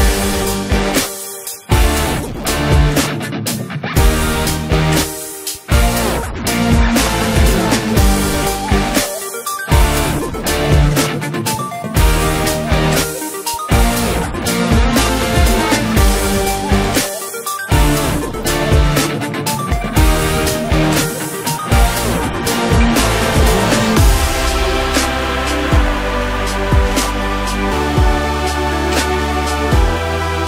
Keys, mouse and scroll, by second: 1.8-2.5 scroll up 1, 2.5-3.6 scroll down 1, 3.6 click, 4.3 click, 4.9 click, 5.8 shift+drag, 6.5 shift+click, 7.6 ctrl+l, 9.3 click, 11.1-12.4 drag, 18.8 click, 19.3 scroll up 1, 19.5 scroll down 1, 19.7-20.8 middle drag, 20.8-21.6 scroll up 1, 21.6 KP_1, 23.0 drag, 23.6 click, 25.0-26.3 drag.